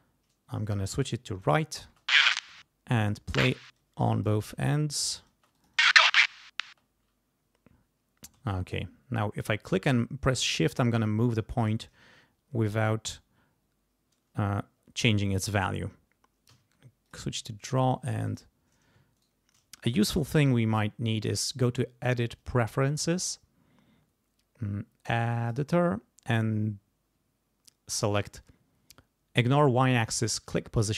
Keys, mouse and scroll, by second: 0.6 click, 1.8 space, 3.0 click, 3.3 space, 4.1 click, 4.5 space, 5.3 space, 5.5 click, 6.6 space, 8.5-11.2 shift+drag, 16.5 d, 17.0 click, 18.3 click, 19.1 shift+right click, 21.5 click, 22.4 click, 25.4 click.